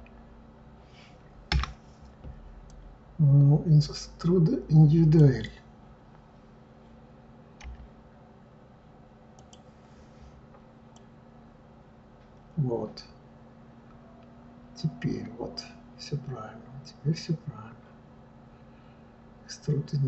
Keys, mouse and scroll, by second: 2.6-5.7 drag, 10.9 click.